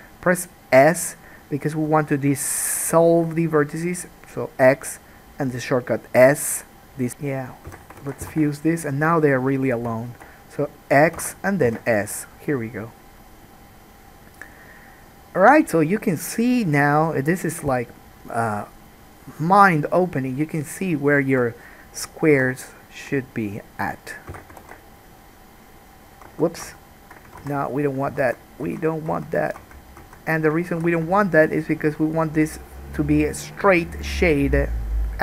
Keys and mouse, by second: 7.1 3, 7.8 f, 8.2 alt+a, 8.4 1, 8.9 click, 9.1-10.2 middle drag, 10.2 shift+click, 10.3-20.7 middle drag, 11.3 x, 17.7 k, 22.5 3, 23.0 click, 23.7 shift+click, 24.5 f, 24.8 alt+a, 26.4 ctrl+z, 26.8 ctrl+z, 27.7 alt+a, 28.3 ctrl+z, 28.8 ctrl+z, 29.3 ctrl+z, 29.8 ctrl+z, 29.8-35.2 ctrl+middle drag, 30.2 ctrl+z, 30.9 alt+a.